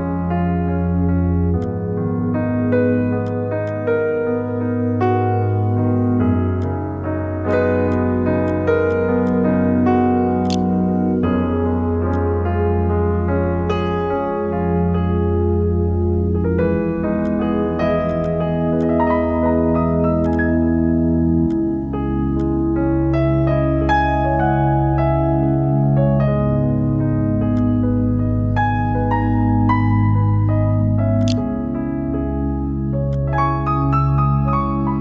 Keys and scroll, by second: 9.9 e, 10.7 1, 30.3 space, 30.4 ctrl+v, 30.9 ctrl+b, 31.3-32.2 typing.